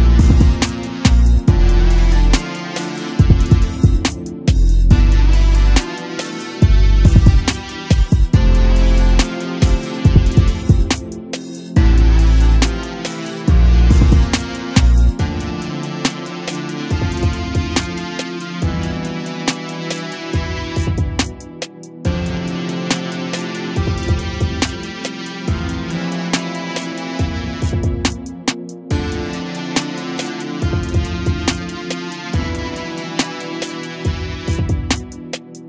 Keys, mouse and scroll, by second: 4.3 click, 4.8 scroll up 1, 6.3 scroll up 1, 6.7 a, 6.9 a, 7.1-7.6 scroll up 1, 7.6-8.8 shift+middle drag, 8.8-11.8 drag, 12.6 a, 12.8 a, 13.3 click, 14.3-16.1 drag, 23.6-26.6 drag, 30.5 scroll down 1, 30.8 a, 30.9 a, 31.8 click, 33.7-34.7 drag.